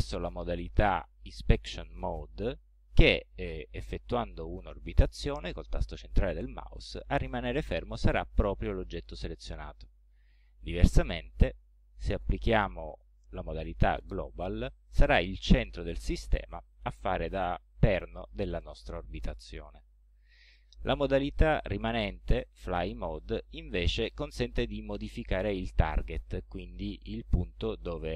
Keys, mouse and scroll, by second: 0.0-2.8 drag, 2.9-7.0 middle drag, 7.0 scroll down 1, 11.1 click, 13.9 click, 14.8-19.7 middle drag, 21.2 click, 23.1 click, 24.0-28.1 middle drag.